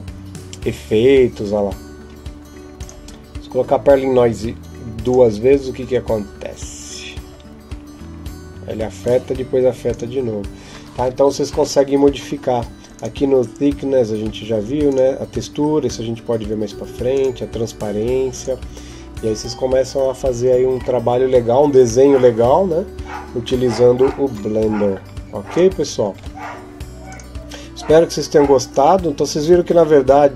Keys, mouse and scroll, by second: 23.8 Escape, 23.8 scroll down 2, 24.7 scroll up 1, 25.3 right click, 25.3-26.9 scroll up 1, 26.9 click.